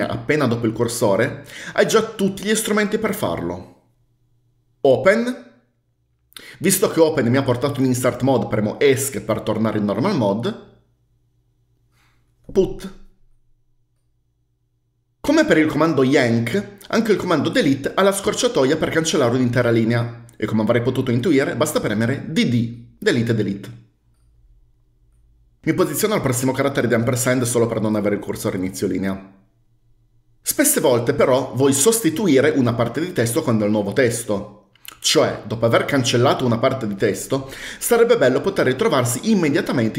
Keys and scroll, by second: 5.3 o, 9.4 Escape, 12.8 p, 22.6 typing, 27.3-27.6 typing.